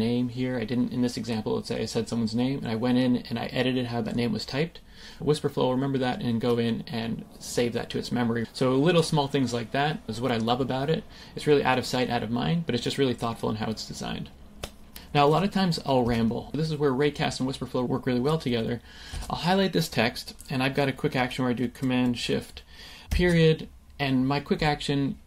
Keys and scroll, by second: 16.0 space, 19.1 super+a, 23.0 shift+super+>, 23.2 shift+super+..